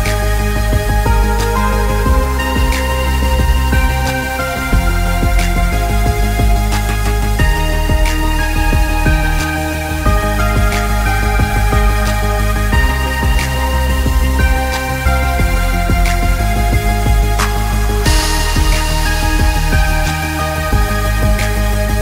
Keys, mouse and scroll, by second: 9.8 scroll up 1, 10.2 alt+scroll down 1, 10.8 space, 10.9 click, 11.2 space, 11.6 space, 13.8 click, 17.5 click.